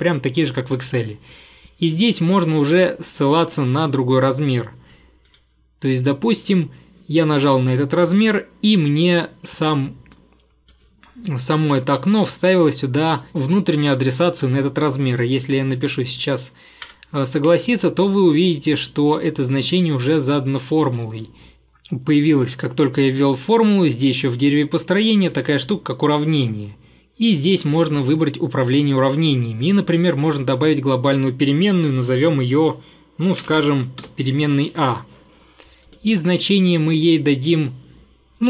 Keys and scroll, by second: 20.9 Escape, 34.1 ф.